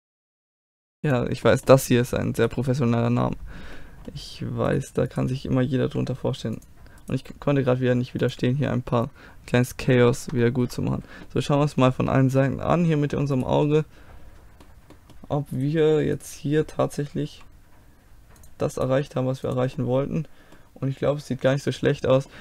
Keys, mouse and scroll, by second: 0.7 right click, 0.8 g, 1.0 click, 1.5 middle click, 2.4-4.1 drag, 4.1-5.9 middle drag, 4.7-6.7 drag, 5.9 g, 7.2 g, 8.3 click, 8.7-13.4 middle drag, 13.4 click, 13.9-16.5 middle drag, 16.5-17.9 drag, 17.3 g, 17.9 right click, 18.8-19.9 right drag, 18.9 g, 19.9 click, 20.4-21.7 middle drag.